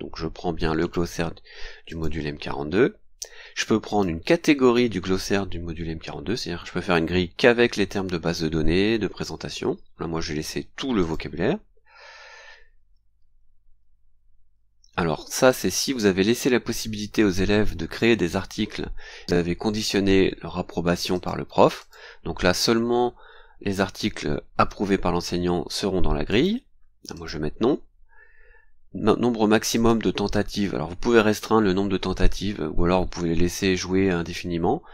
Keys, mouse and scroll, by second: 0.8 click, 1.9 click, 2.8 scroll down 1, 3.9 click, 4.8-11.0 scroll down 2, 11.0 click, 11.8-12.1 scroll down 2, 15.5 click, 21.1 click, 21.7 click, 26.3 click, 27.1 click, 28.0-28.4 scroll down 2, 29.7 click.